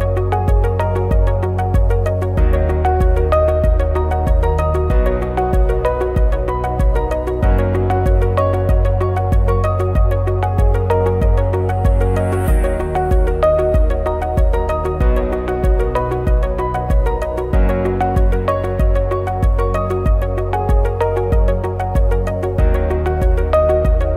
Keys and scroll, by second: 2.3 ctrl+-, 2.7 ctrl+=, 7.9 ctrl+shift+a, 8.9 ctrl+c, 9.0 ctrl+f, 10.1 ctrl+c, 12.6 ctrl+c, 12.7 ctrl+f, 14.1 ctrl+c, 15.8 ctrl+c, 15.9 ctrl+f, 16.8 ctrl+c, 16.9 ctrl+f, 17.9 ctrl+c, 19.4 ctrl+c, 19.5 ctrl+f, 20.8 ctrl+c, 20.9 ctrl+e, 21.9 ctrl+c, 22.0 ctrl+e.